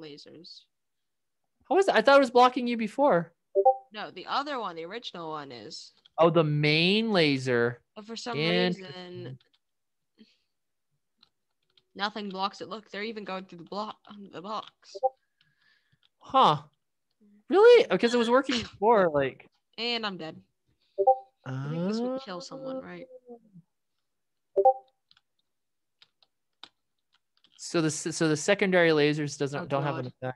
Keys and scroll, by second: 1.6-2.7 typing, 3.7 d, 4.1 w, 4.8 d, 5.9-17.0 typing, 21.5 s, 24.1-29.3 typing.